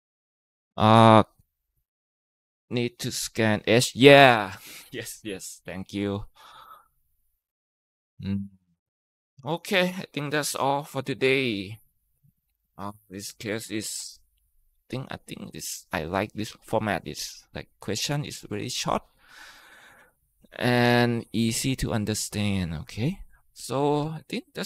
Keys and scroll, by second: 14.5 Escape.